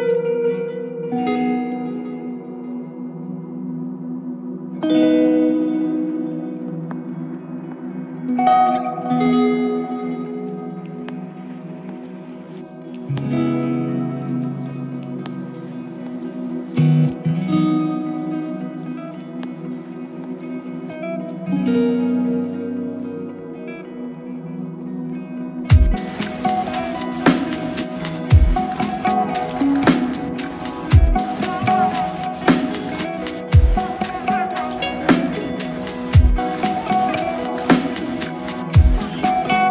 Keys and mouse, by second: 20.7 q, 27.1 double click, 28.4 shift+click, 30.0 shift+click, 34.9 shift+click.